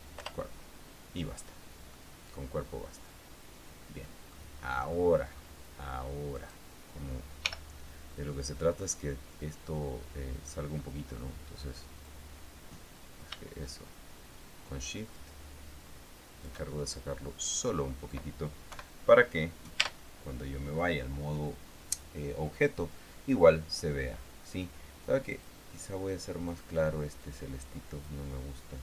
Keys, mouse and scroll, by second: 0.5 Return, 2.3-4.9 middle drag, 5.1 scroll up 2, 5.3 click, 6.7 right click, 7.8 l, 8.5-11.0 drag, 11.1 scroll up 1, 12.4-17.0 drag, 17.1-18.1 shift+middle drag, 18.1-18.5 scroll down 1, 19.1 KP_1, 20.2 Tab, 25.7 click, 26.9 click, 27.6-28.6 drag.